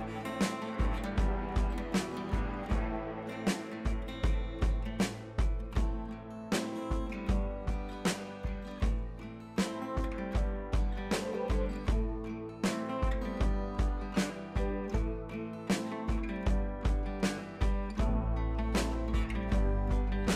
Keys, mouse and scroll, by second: 1.9-2.3 alt+click, 2.9-4.7 alt+drag.